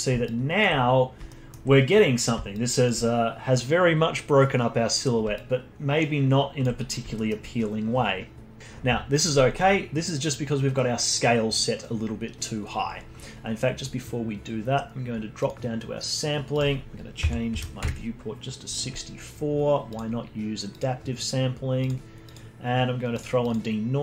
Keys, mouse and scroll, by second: 0.2-1.3 alt+drag, 1.3-2.5 alt+middle drag, 2.5-4.9 alt+drag, 4.9-5.3 scroll down 1, 5.3-7.1 alt+drag, 7.1-8.6 alt+middle drag, 13.7 click, 15.4-19.6 drag, 19.8-21.0 drag, 21.8-23.1 drag, 23.4-24.0 drag.